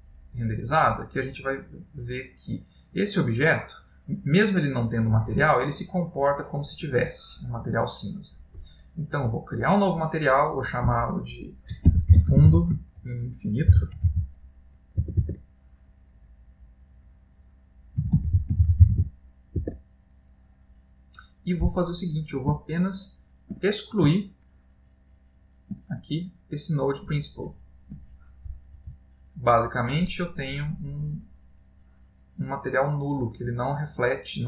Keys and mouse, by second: 1.0 middle click, 5.0 middle click, 9.6 middle click, 9.6 click, 10.6 click, 15.4 BackSpace, 22.0 middle click, 22.7 ctrl+middle click, 23.8 middle click, 24.3 ctrl+middle click, 26.5 click, 27.5 click, 29.1 Delete, 30.1 middle click.